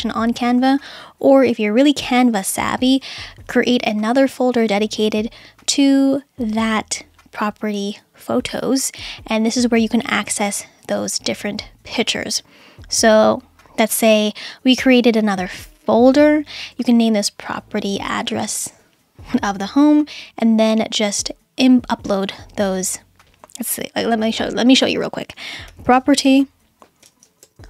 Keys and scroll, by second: 25.5-27.6 typing.